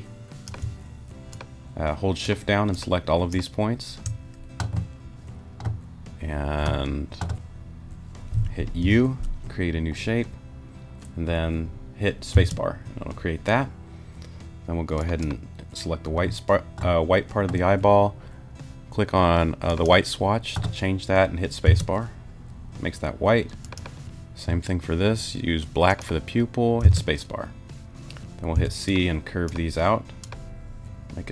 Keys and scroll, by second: 8.8 u, 12.3 space, 21.7 space, 26.8 space, 28.5 c.